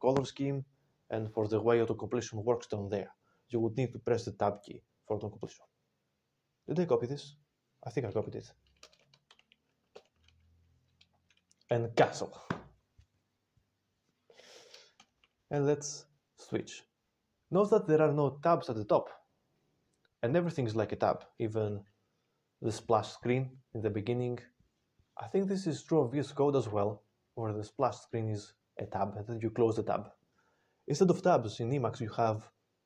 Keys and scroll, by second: 8.7 ctrl+space, 9.2 ctrl+e, 9.8 alt+w, 11.8 ctrl+g, 14.9 ctrl+x, 15.4 b.